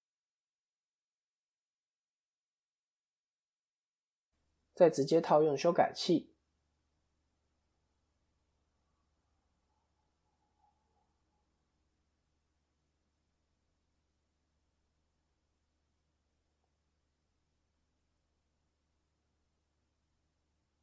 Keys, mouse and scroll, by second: 6.6 middle click, 7.9 KP_1, 9.7 middle click, 13.4 click, 14.2 KP_3, 14.5 KP_1, 16.1 click, 18.0 KP_1, 18.5 ctrl+KP_3, 19.3-20.0 scroll down 3, 20.0 scroll down 1, 20.0 KP_3.